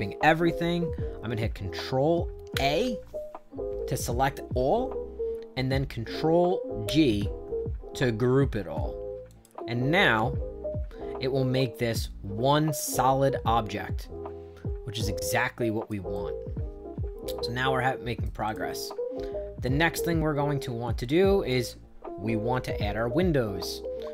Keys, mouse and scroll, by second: 2.4 ctrl+a, 6.8 ctrl+g, 9.2 click, 12.7-15.8 drag, 16.0-18.1 right drag, 18.3 click, 18.8-21.4 right drag.